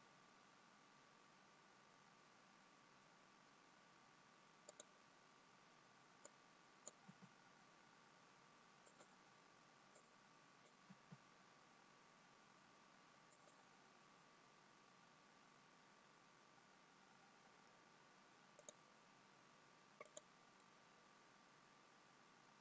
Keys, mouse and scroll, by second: 6.8 click, 8.9 g, 10.0 click, 15.2 g, 19.7 click, 19.7-21.3 scroll down 1, 21.3 click, 21.3 middle click.